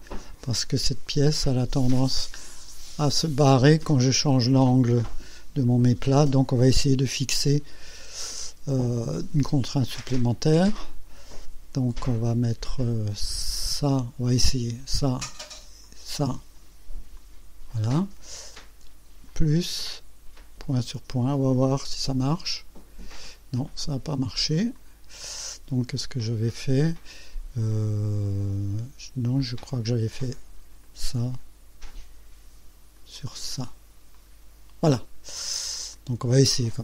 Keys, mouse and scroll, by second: 2.7 click, 8.9 right click, 13.7 click, 15.6 click, 17.2 click, 19.3 click, 21.2 click, 22.3 click, 24.8 click, 29.4 click, 30.9 click, 33.0 click, 34.2 click, 35.9 click.